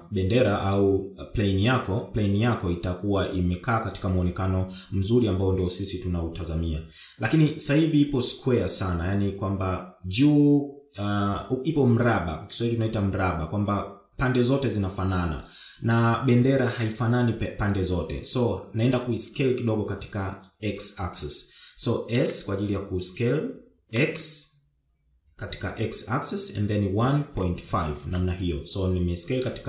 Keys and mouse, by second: 22.3 s.